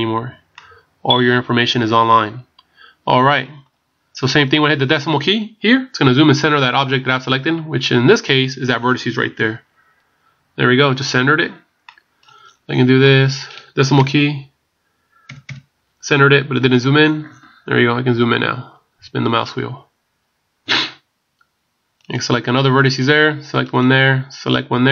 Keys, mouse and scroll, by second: 0.6 middle click, 4.0 scroll down 5, 9.4 KP_Decimal, 11.9 middle click, 12.4 scroll down 1, 13.1 middle click, 13.1 scroll down 15, 14.0 KP_Decimal, 15.3 KP_Decimal, 16.6 scroll up 4, 18.2 scroll down 3, 18.9 scroll down 1, 19.0 scroll up 1, 19.3 scroll down 1, 22.0 right click, 23.7 right click.